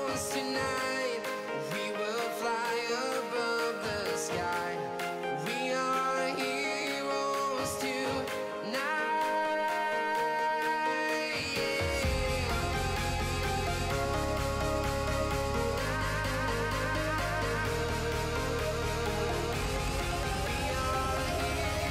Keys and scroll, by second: 3.9 Escape, 6.9 Escape, 19.5 Escape.